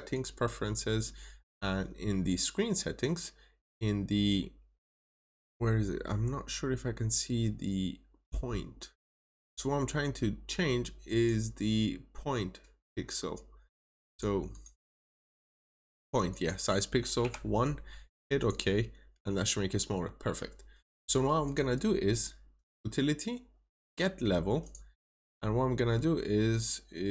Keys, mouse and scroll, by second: 14.4 double click, 16.2 click, 17.1 typing, 18.0 click, 18.3 double click, 21.3 click.